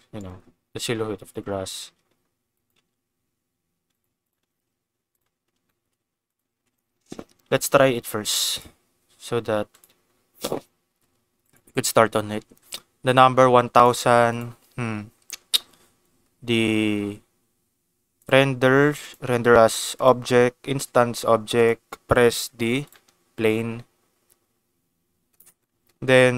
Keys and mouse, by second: 0.1 click, 1.5 s, 1.6 z, 2.5 click, 2.7 g, 2.7 z, 3.9 click, 5.1 click, 5.6 shift+middle click, 6.2 click, 6.5 ctrl+s, 7.1 shift+middle click, 7.5 ctrl+s, 8.5 click, 9.7 click, 11.4 click, 13.8 click, 14.3 click, 18.1 click, 19.0-20.1 drag, 21.6 click.